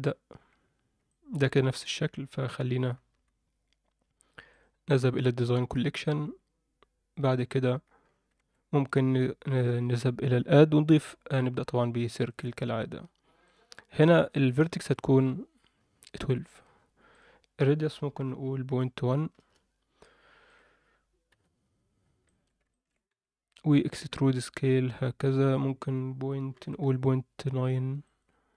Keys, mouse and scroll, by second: 1.0 alt+middle click, 2.7 KP_1, 3.1 KP_7, 4.5 click, 7.5 click, 8.0-8.3 scroll up 2, 8.3 shift+a, 13.5 click, 14.4-16.6 drag, 18.2-19.4 drag, 20.5 drag, 21.3 KP_Decimal, 22.2 shift+middle drag, 22.7 ctrl+middle click, 23.1 Tab, 23.8 e.